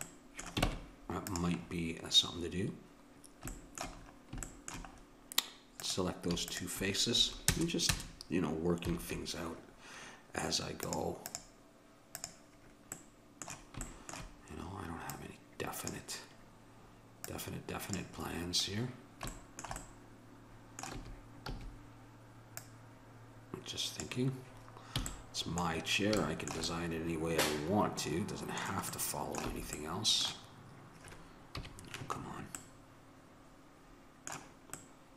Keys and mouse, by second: 0.7 ctrl+Tab, 5.8-7.5 right drag, 7.5 ctrl+KP_Add, 10.9-13.2 drag, 13.2 middle click, 15.2-19.1 drag, 21.0 a, 21.6 a, 22.6-24.5 drag, 25.1 a, 25.1-26.8 middle drag, 29.5 a, 31.6 KP_Decimal.